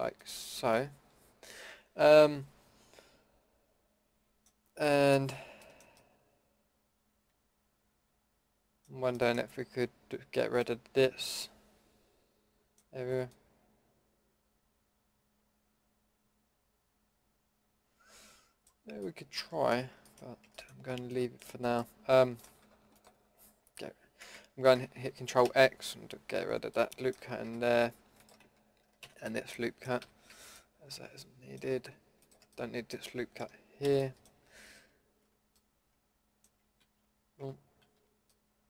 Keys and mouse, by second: 0.2 click, 4.8-5.8 middle drag, 6.0 middle click, 6.2 middle click, 6.4 middle click, 7.2 middle click, 9.1 middle drag, 10.7-12.6 middle drag, 13.0-14.3 middle drag, 14.5-14.8 middle drag, 15.1 middle click, 16.7 middle click, 18.7-21.1 middle drag, 21.6-22.0 middle drag, 22.9-25.5 middle drag, 25.5 ctrl+x, 27.5 a, 27.7 a, 29.0 ctrl+x, 30.0 a, 30.3 a, 33.8 ctrl+z, 36.8 ctrl+z, 37.8 ctrl+z.